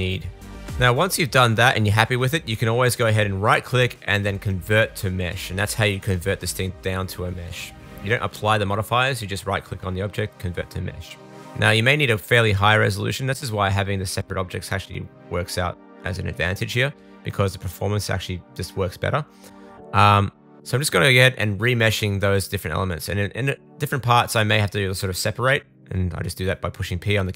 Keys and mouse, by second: 3.6-9.2 middle drag, 10.8 click, 11.9 super+s, 12.0 shift+click, 13.6 super+s, 13.7-16.9 drag, 13.9-15.2 middle drag, 13.9-15.2 right drag, 15.4 Tab, 15.6 l, 15.8 p, 17.9 super+s, 18.1-22.2 shift+drag, 20.5 Tab, 20.7 Tab, 20.9-22.2 middle drag, 20.9-22.2 right drag, 22.3 super+a, 22.6 super+s, 23.3 Tab, 23.5 right click, 23.7 l, 23.7-25.4 drag, 24.2 Tab, 24.8 super+j, 25.7 click, 26.2 super+z, 26.9 super+s.